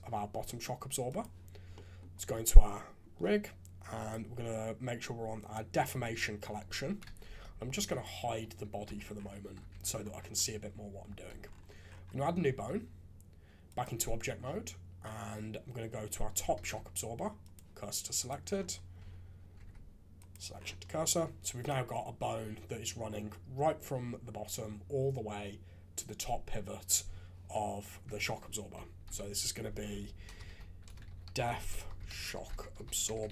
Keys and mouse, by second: 1.7 click, 2.2 Tab, 3.9 click, 5.3 click, 6.0 click, 6.8 KP_3, 7.1 shift+z, 7.9 click, 8.8 h, 9.7 alt+a, 11.1 shift+a, 12.3 Tab, 16.5 shift+s, 18.4 middle drag, 18.9 Tab, 19.5 shift+s, 20.5 middle click, 21.6 middle click, 28.0 F2.